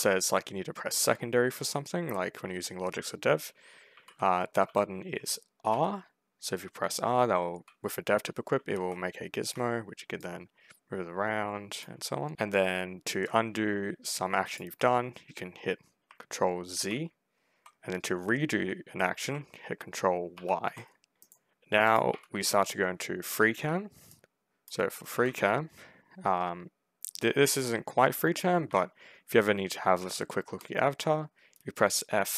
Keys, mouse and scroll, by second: 1.4 s, 3.3 d, 3.8 s, 4.5 s, 5.6 r, 6.8 d, 8.1-9.1 typing, 10.1-11.5 drag, 11.6 click, 12.0 d, 12.3 a, 13.0 w, 13.9 click, 16.6 ctrl+z, 20.2 ctrl+y, 21.1 middle click, 21.7 click, 22.0 1, 22.3 w, 23.0 w, 24.0 right click, 24.6-25.5 typing, 28.5 F5, 29.4-30.4 typing.